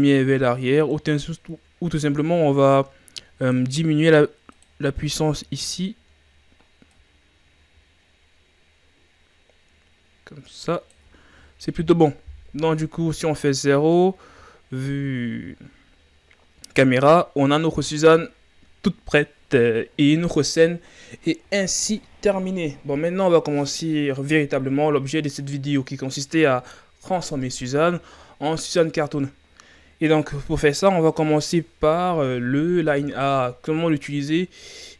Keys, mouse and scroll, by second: 1.3-2.4 scroll up 4, 3.5 click, 4.6 click, 12.5 KP_0, 13.9-14.8 scroll up 5, 14.8-15.1 scroll up 1.